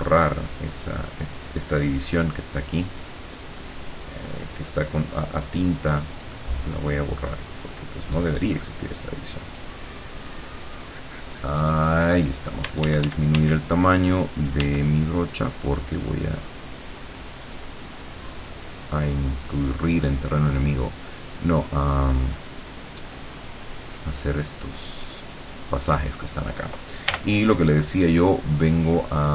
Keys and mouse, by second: 2.4-12.5 drag, 12.7 d, 14.6 d, 15.0-20.2 drag, 20.8-23.4 drag, 23.9-26.1 drag, 27.2 l, 28.6 click.